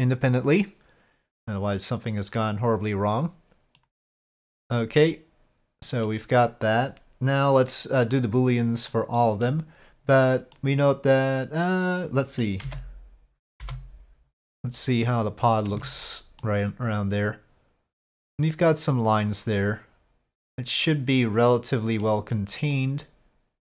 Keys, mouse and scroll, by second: 4.7-6.1 middle drag, 8.9-9.5 middle drag, 10.5-12.4 middle drag, 12.6 z, 15.1 click, 15.7 Tab, 16.4-22.0 middle drag, 22.8-23.7 middle drag.